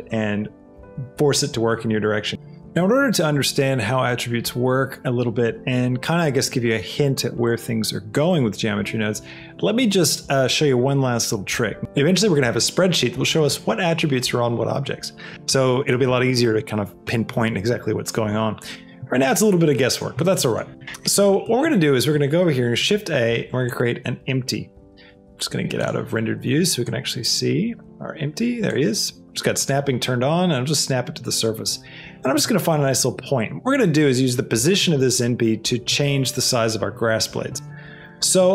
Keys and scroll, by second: 22.1 shift+a, 26.6 g, 27.7 g.